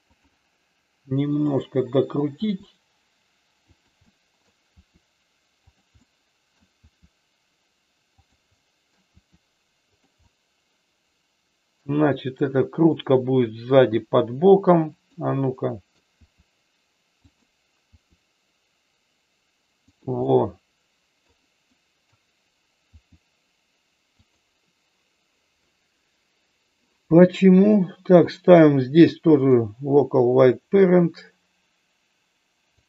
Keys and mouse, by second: 1.3 click, 2.3 r, 3.6 click, 4.1 middle click, 4.7 r, 6.0 middle click, 8.1 click, 8.6 middle click, 9.1 r, 10.2-11.7 middle drag, 13.7 r, 15.6 middle click, 16.1 r, 17.2 click, 20.2-21.3 middle drag, 21.7 middle click, 22.8 r, 27.7-29.5 drag, 31.2-32.8 drag.